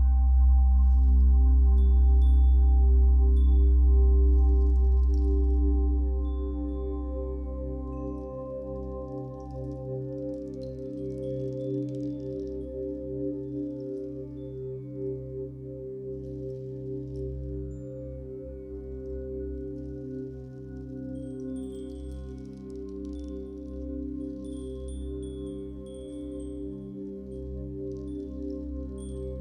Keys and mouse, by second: 0.3 click, 1.1 r, 1.4 x, 1.5 x, 2.9 click, 4.0 click, 4.4 click, 5.7 typing, 6.8 Escape, 7.0-8.7 typing, 7.8 click, 10.2 click, 11.9-12.8 drag, 12.8 g, 14.0-18.8 drag, 14.8 typing, 19.5 alt+click, 20.9-21.4 ctrl+alt+drag, 21.7-24.5 alt+drag, 24.8-29.4 ctrl+alt+shift+drag.